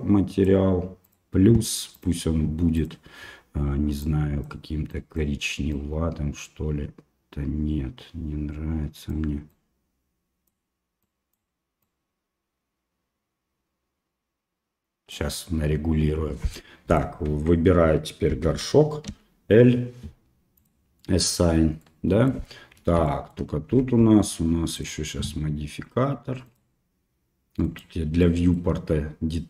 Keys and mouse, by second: 0.0 click, 2.0-16.5 drag, 16.5 middle click, 17.3 Tab, 18.5 alt+a, 19.1 l, 21.0 middle click, 21.8 middle click, 23.1 shift+middle click, 26.5 click, 27.6 click, 28.3 middle click.